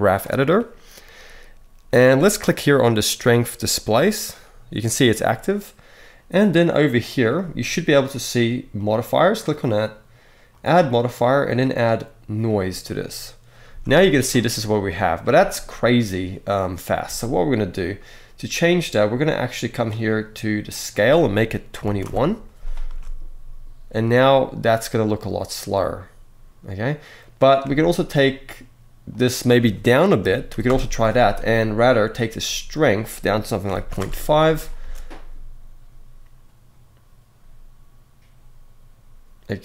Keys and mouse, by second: 2.7-3.6 drag, 3.9 click, 6.5 click, 8.5 click, 10.3-12.3 drag, 13.4 space, 18.7 click, 20.4-21.8 drag, 22.6 space, 27.4 space, 28.9-30.4 drag, 32.6-33.7 drag, 34.5 space.